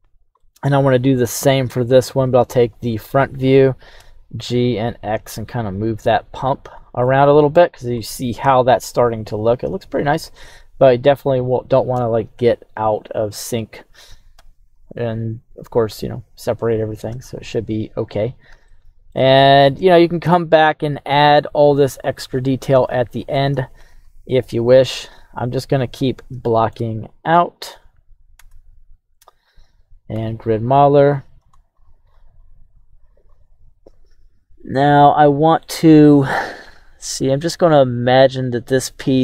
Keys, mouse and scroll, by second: 0.4 middle click, 1.7 KP_1, 2.5-3.3 scroll up 3, 4.0 g, 4.3 x, 6.4 click, 6.7 scroll down 2, 7.0 middle click, 7.7 scroll down 1, 8.0-13.6 middle drag, 13.4 scroll up 1, 14.4 KP_3, 14.9-16.1 scroll down 2, 16.6 click, 17.3-18.0 scroll up 3, 18.7 shift+middle click, 19.7 2, 22.3-22.7 scroll down 3, 22.8 shift+middle click, 24.9 z, 26.0 scroll up 2, 26.4 shift+middle click, 27.0 right click, 27.6 Tab, 28.3 Tab, 30.1 q.